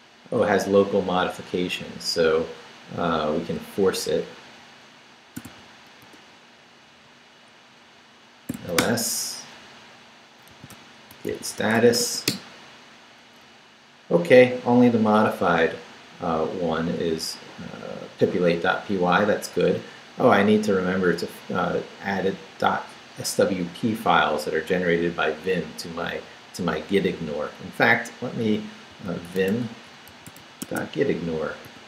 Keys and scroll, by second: 4.0 Up, 5.4 f, 6.0 Return, 8.5 l, 8.8 Return, 10.3-12.5 typing, 28.7-31.8 typing.